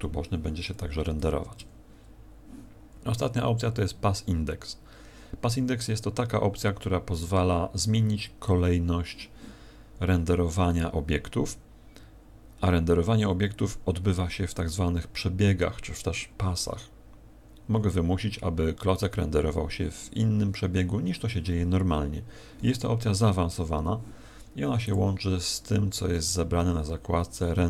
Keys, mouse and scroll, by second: 1.5 F12, 1.5 Escape, 24.8 click.